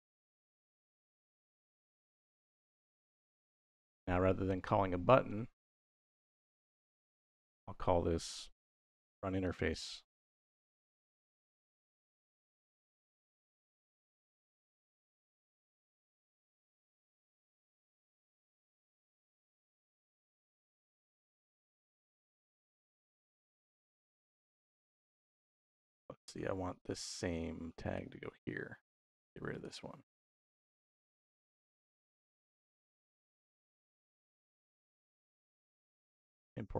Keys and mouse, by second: 0.7 BackSpace, 1.5 t, 4.4 click, 5.2 middle click, 5.9 middle click, 6.9 click, 8.1 x, 8.4 shift+a, 9.8 shift+a, 16.9 middle click, 17.9 click, 18.8 click, 19.7 click, 22.8-25.0 middle drag, 25.8 middle click, 26.6-27.8 drag, 29.3 click, 30.0-31.4 middle drag, 31.8-33.5 drag, 34.3-35.1 drag.